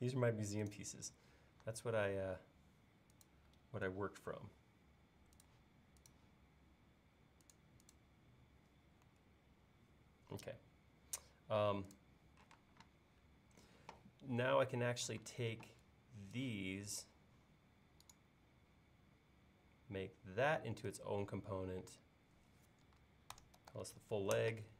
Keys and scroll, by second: 3.9 Up, 9.1 Left, 12.6 space, 15.2 space, 23.1-24.7 typing.